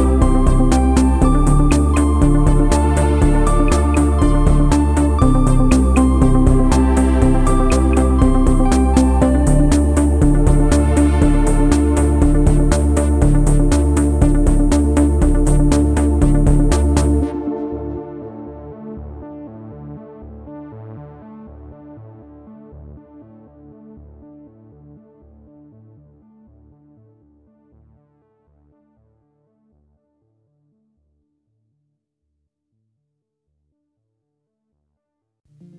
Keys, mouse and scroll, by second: 0.0 ctrl+s, 0.1 Tab, 0.1 q, 0.3 click, 0.4 click, 0.7 Tab, 0.7 q, 27.7 middle click, 27.8 scroll down 1, 27.8 g, 27.9 middle click, 28.1 g, 28.6 middle click, 31.6 ctrl+a, 31.7 q.